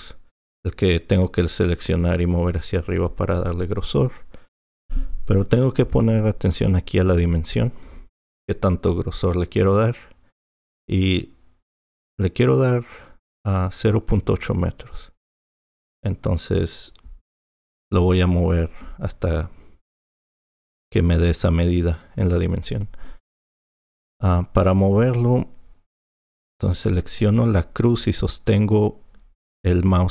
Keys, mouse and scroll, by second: 6.0-9.1 drag.